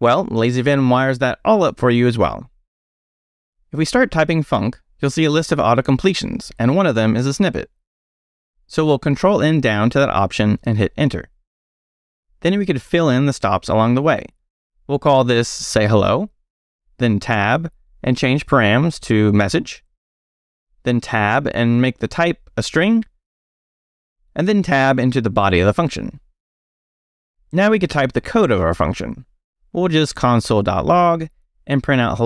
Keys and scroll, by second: 0.7 k, 1.2 i, 2.1 Return, 2.9 Up, 4.1-5.4 typing, 8.4 ctrl+n, 10.6 Return, 14.5-16.6 typing, 17.3 Tab, 18.7-22.4 typing, 20.7 Tab, 24.7 Tab, 26.4 BackSpace, 28.1-32.2 typing.